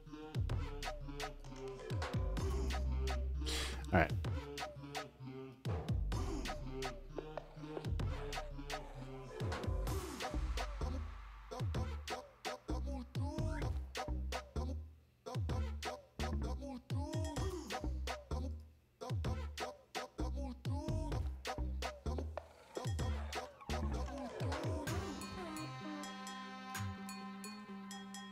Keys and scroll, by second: 18.5 space, 19.0 super+space, 24.2 space, 24.7 space, 27.0 space, 27.7 space.